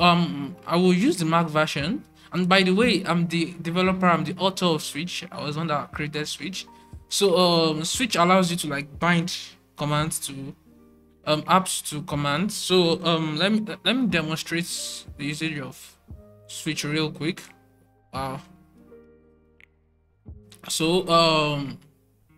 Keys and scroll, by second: 0.1 alt+2, 0.6 alt+3, 1.6 alt+super+1, 3.0 alt+super+2, 4.2 alt+super+3, 6.4 alt+super+1, 7.7 alt+super+2, 9.0 alt+super+3, 11.1 alt+super+1, 12.5 alt+super+2, 13.7 alt+super+3, 15.9 alt+super+1, 17.3 alt+super+2, 18.5 alt+super+3, 20.6 alt+super+1, 22.0 alt+super+2.